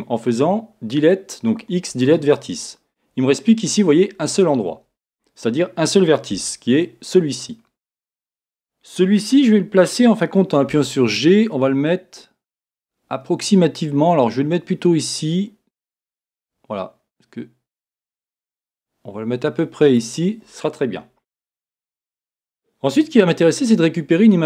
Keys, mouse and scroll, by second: 6.5 b, 10.6 g, 19.9 click, 24.1-24.4 scroll down 2.